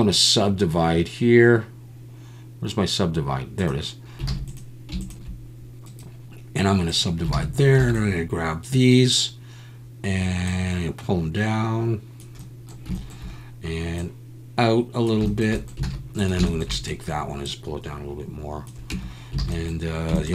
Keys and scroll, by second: 4.3 alt+a, 7.8 b, 15.9 alt+a, 18.9 Tab, 19.4 alt+a.